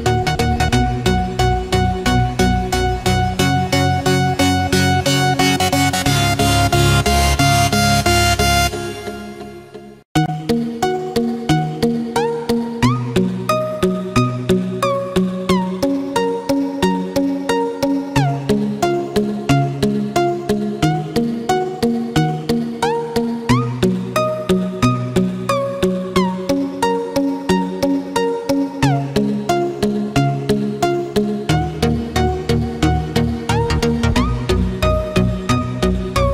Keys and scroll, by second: 3.1 ctrl+d, 9.5 ctrl+f, 9.9 ctrl+d, 17.4 ctrl+f, 19.7 ctrl+d, 27.3 ctrl+f, 27.8 ctrl+d.